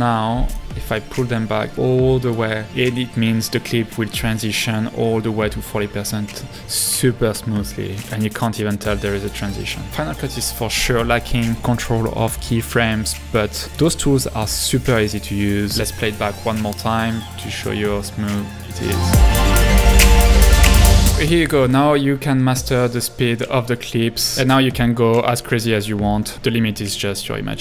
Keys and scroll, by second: 6.7 space.